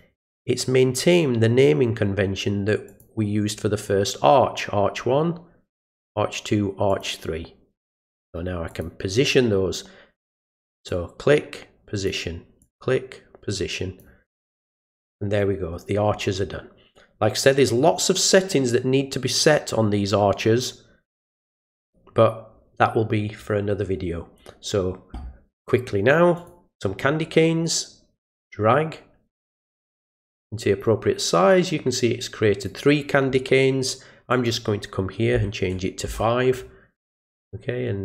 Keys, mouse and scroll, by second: 2.9 click, 5.8 click, 6.9 click, 7.8 click, 8.7 click, 10.9-12.1 drag, 12.6-14.0 drag, 26.4 click, 28.2-30.8 drag, 31.5-32.6 drag, 34.3 click.